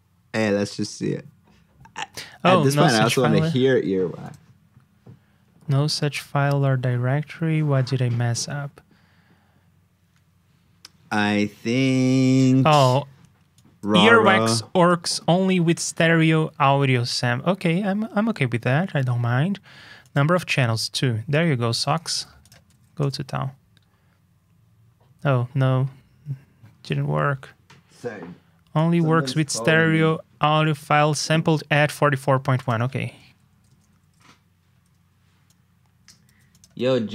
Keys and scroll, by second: 22.1 super+c, 22.6 super+v, 36.2 super+c, 36.7 super+v.